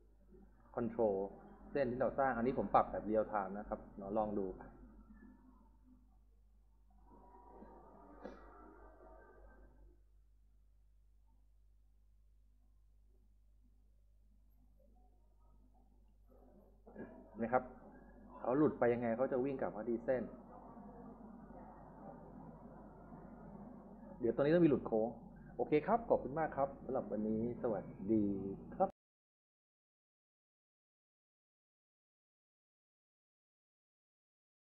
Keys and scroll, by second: 5.0-6.1 typing, 16.4 s, 16.7 d, 17.3 s, 19.1 s.